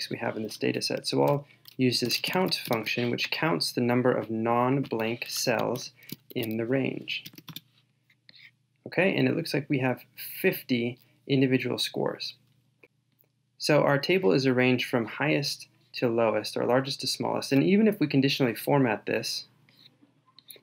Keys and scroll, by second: 5.7 shift+super+Down, 12.8 shift+super+Down.